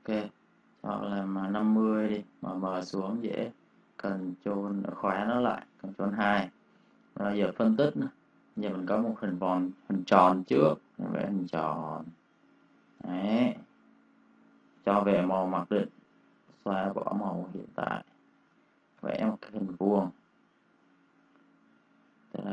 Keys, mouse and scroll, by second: 1.1-1.9 typing, 2.7 click, 4.1 ctrl+2, 4.4 click, 4.6 space, 4.7 click, 5.2 ctrl+click, 6.6 space, 7.0 click, 7.4 ctrl+click, 12.9 space, 13.0 click, 14.5 d, 16.2-17.8 typing, 17.6 click, 18.0 click, 18.9 m, 20.3 click.